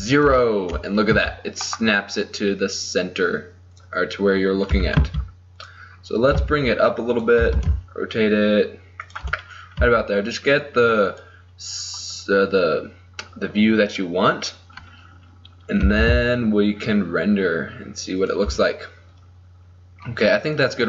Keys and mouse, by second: 0.0 ctrl+alt+KP_0, 1.2 g, 4.4 middle click, 4.8 r, 5.7 middle click, 6.1 middle click, 6.4 g, 7.5 r, 7.9 middle click, 9.4 middle click, 10.0 g, 15.9 r, 19.5 middle click, 20.6-20.8 middle drag.